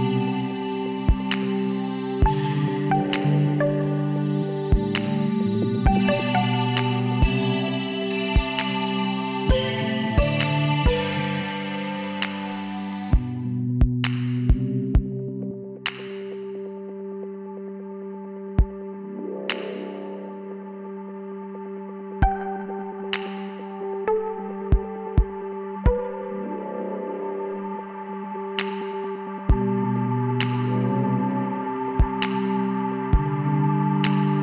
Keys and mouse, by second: 2.3 z, 4.4 z, 5.8-7.5 drag, 8.4 click, 9.4 Tab, 12.2 shift+a, 16.9-18.7 drag, 19.9-23.6 middle drag, 26.0-27.8 drag, 28.1 KP_7, 28.6 middle click, 30.1 g, 32.4 z, 33.7 s.